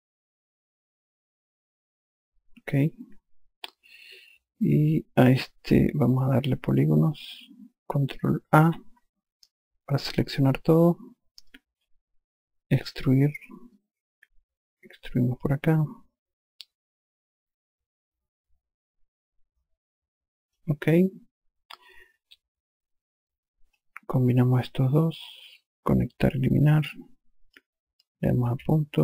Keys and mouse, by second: 0.7 ctrl+click, 7.6 click, 9.2 ctrl+a, 11.3 click, 13.3 click, 23.7 click, 25.5 click, 27.1 click.